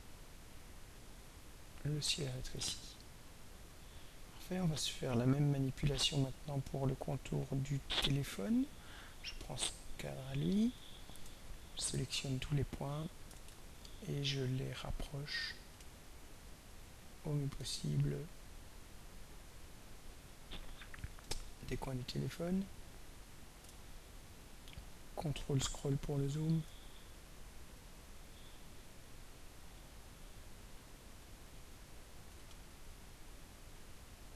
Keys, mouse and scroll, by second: 9.3 click, 11.6 ctrl+scroll down 2, 13.4 ctrl+a, 15.8-16.9 alt+drag, 17.3-20.2 alt+drag, 21.7 alt+middle click, 21.7-22.2 alt+scroll up 2, 22.0 alt+middle click, 24.0-24.4 ctrl+scroll up 2, 24.7-25.0 ctrl+scroll up 2, 27.7 click, 29.1 click, 30.2-31.3 drag, 32.4 click.